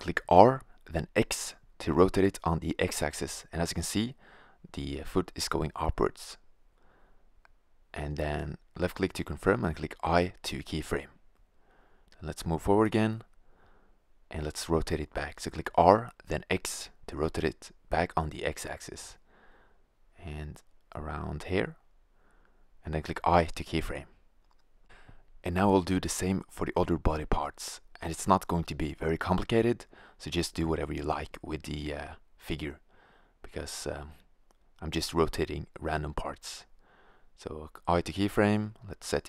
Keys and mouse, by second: 0.6 r, 7.9-9.9 drag, 10.2 i, 11.7-13.9 drag, 14.8 r, 21.6-22.1 middle drag, 22.1 click, 22.5 i, 23.3-24.0 drag, 26.0 click, 26.6 right click, 27.1 i, 27.6-28.4 drag, 29.0 r, 30.3 click, 31.0 i, 31.6-32.3 drag, 32.5 r, 34.2-34.9 drag, 34.7 i, 35.3-35.9 drag, 37.3 click, 38.9-39.2 middle drag.